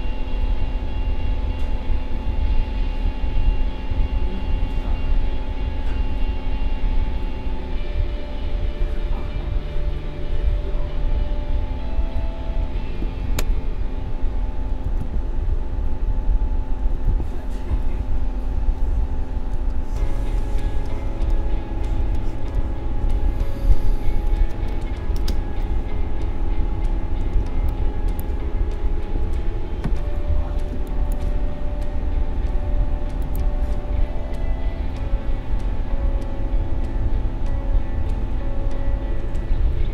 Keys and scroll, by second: 19.5 space, 29.0 ctrl+a.